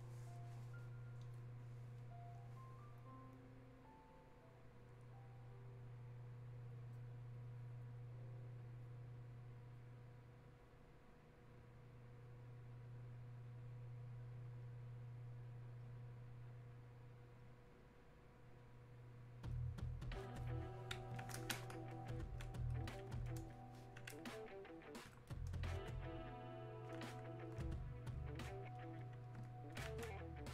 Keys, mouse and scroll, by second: 2.0-12.0 drag, 19.5-26.9 drag, 26.9-29.7 alt+drag, 29.7-30.5 alt+drag.